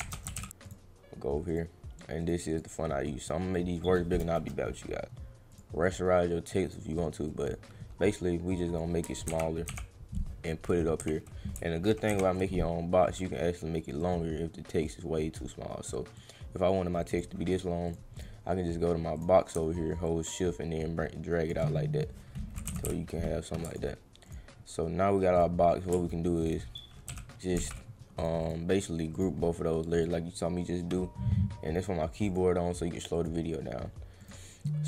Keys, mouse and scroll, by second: 0.1 Caps_Lock, 0.2 s, 0.6 click, 1.5 click, 2.2 click, 2.5 click, 3.0 click, 3.5 click, 5.5 click, 5.8 click, 7.2-8.7 drag, 14.0 click, 16.2 click, 17.8 click, 19.1 click, 20.0 shift+click, 23.6 ctrl+click, 24.3 click, 25.3 click, 26.3 ctrl+click, 27.5 ctrl+e, 28.1 click, 28.4 click, 29.1 right click, 29.9 click, 32.3 click, 33.1 click, 34.2 click.